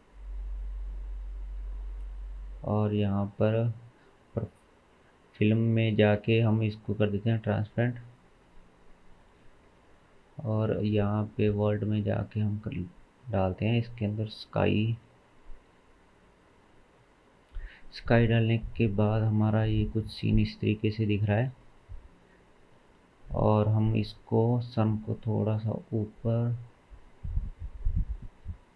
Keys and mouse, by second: 0.3 click, 2.9 click, 5.4-7.5 drag, 8.1 click, 10.9-13.9 drag, 14.1 shift+a, 17.7-21.1 drag, 21.5-28.7 shift+middle drag.